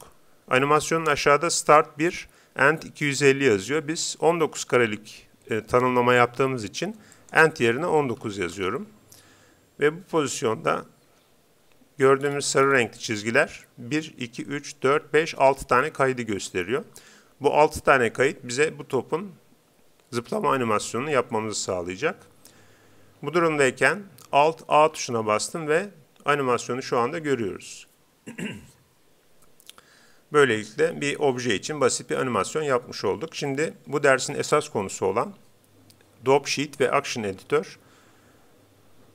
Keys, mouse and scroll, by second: 7.1-9.0 drag, 11.1 Home, 12.2-13.2 scroll up 1, 13.4-14.8 middle drag, 24.8 alt+a.